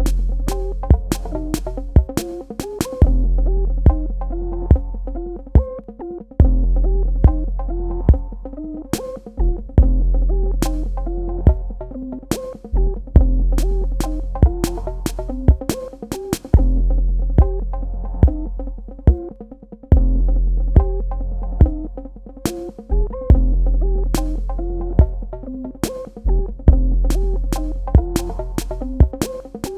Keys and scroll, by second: 14.7 super+Num_Lock, 15.0 KP_Add.